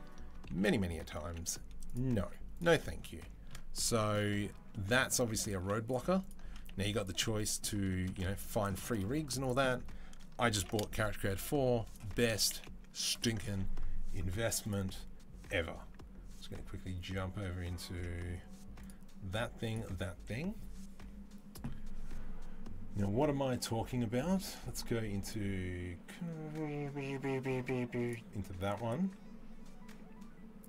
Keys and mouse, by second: 0.3 ctrl+z, 1.0 Delete, 2.0 z, 5.3 z, 6.0 alt+click, 6.1-8.9 alt+middle drag, 6.5 z, 8.9 z, 10.4 ctrl+b, 12.3 Delete, 15.3-30.6 middle drag.